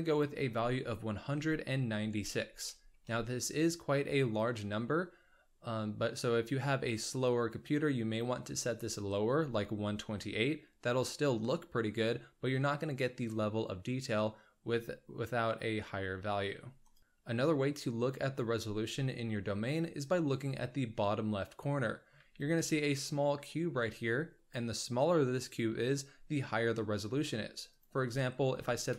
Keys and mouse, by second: 0.1-3.5 drag, 8.7-16.8 drag, 17.0 shift+middle click, 19.2-20.1 shift+middle drag, 20.9-22.0 ctrl+drag, 22.5-23.5 shift+middle drag, 27.6-28.9 drag.